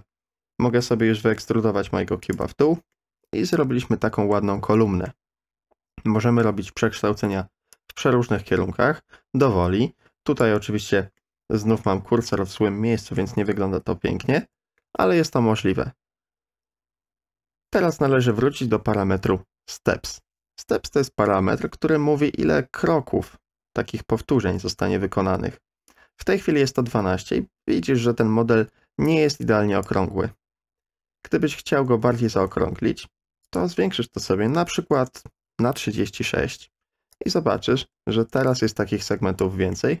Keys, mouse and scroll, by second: 1.2 e, 2.9-4.3 middle drag, 5.1-6.4 middle drag, 6.8 KP_3, 7.7-10.4 drag, 11.2-11.8 middle drag, 12.2-13.1 middle drag, 13.6 ctrl+z, 14.4 ctrl+z, 14.8 ctrl+z, 21.5 KP_3, 22.2 KP_2, 23.2 KP_1, 25.9-29.9 drag, 32.3 ctrl+z, 33.6-36.0 drag, 37.1-39.4 drag, 39.7-40.0 middle drag.